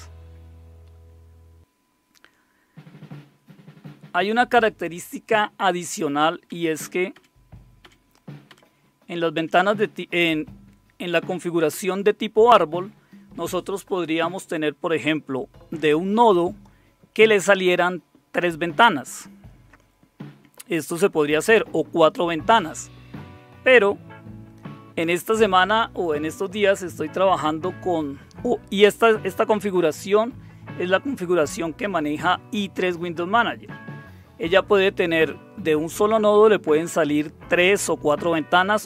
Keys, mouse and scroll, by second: 6.7 Up, 7.1 Up, 7.8 Up, 8.5 Up, 9.3 Up, 11.7 Up, 19.6 super+Return, 21.9 super+Return, 28.4 super+Return, 38.3 super+Return.